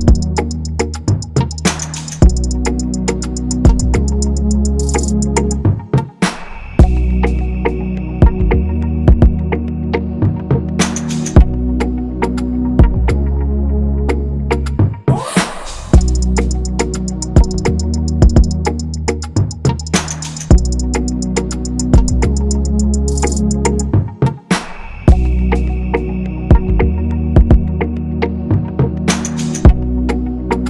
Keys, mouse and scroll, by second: 7.0 alt+click, 8.0 double click, 8.2 ctrl+a, 8.5 alt+Tab, 15.3 ctrl+c, 15.6 alt+Tab, 19.8 ctrl+=, 21.4 right click, 22.6 ctrl+-, 23.1-26.4 scroll, 26.4-27.2 typing, 27.1-29.0 scroll up 1, 28.8-29.5 typing.